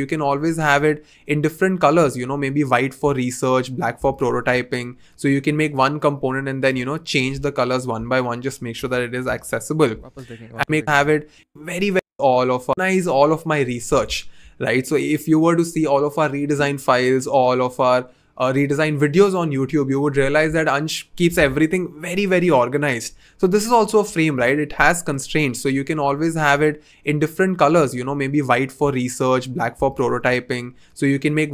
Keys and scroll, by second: 9.1 f, 9.3 Return, 10.8 v, 24.1 v.